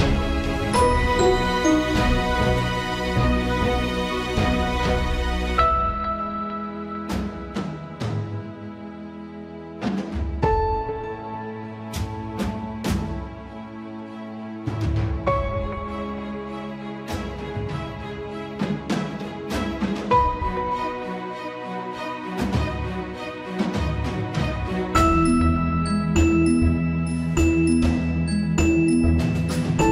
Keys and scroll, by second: 4.8 ctrl+s, 25.1 ctrl+s, 29.1 ctrl+z.